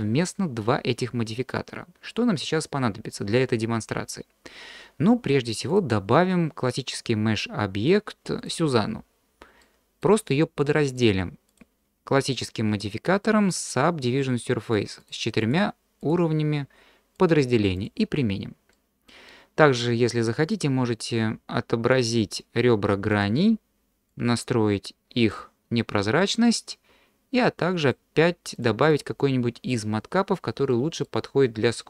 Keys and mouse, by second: 5.8-8.5 drag, 9.6-10.0 middle drag, 10.9 click, 11.6-13.6 drag, 15.0 click, 16.2 click, 17.1-17.9 drag, 18.8 middle click, 20.4-25.6 drag, 27.8-30.1 drag, 30.7-31.0 middle drag.